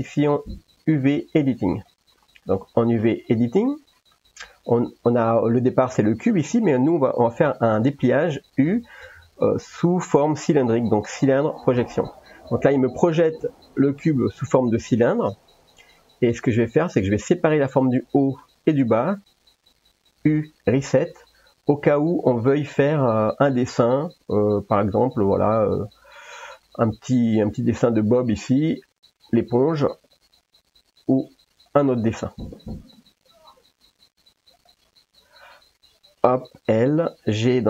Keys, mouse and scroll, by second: 1.8 click, 3.3 middle click, 8.4 u, 15.6 middle click, 17.1 click, 17.5 click, 18.0 middle click, 18.8 shift+click, 20.1 u, 22.6 a, 23.4 s, 24.6 g, 26.3 middle click, 28.5 click, 29.3 l, 30.1 g, 31.8 click, 32.6 l, 33.3 g, 34.6 click, 36.5 l, 37.4 g.